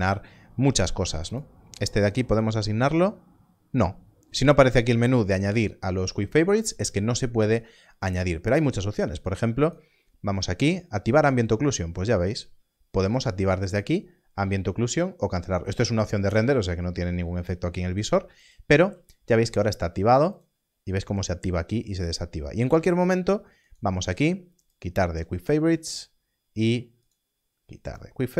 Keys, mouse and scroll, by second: 1.2 right click, 8.0 click, 9.6 right click, 11.0 click, 12.2 click, 14.3 click, 17.5 click, 18.8 click, 22.7 Left, 23.6 right click, 24.6 click, 25.5 q, 27.0 right click.